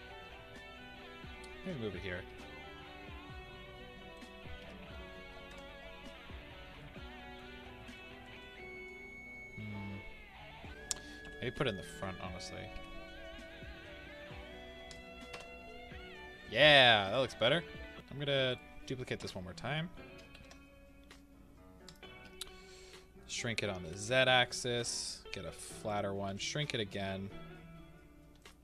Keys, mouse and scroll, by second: 0.2 g, 4.2 click, 5.5 KP_0, 6.7-7.5 middle drag, 7.5 scroll, 8.4-11.2 middle drag, 12.8 g, 14.9 click, 16.3-16.8 scroll, 16.8-17.9 middle drag, 17.4-17.9 scroll, 17.9 KP_3, 18.5 click, 19.2 KP_7, 20.3 shift+d, 21.9 click, 22.4-23.9 middle drag, 23.9 s, 25.8 click, 26.3 s, 28.4 click.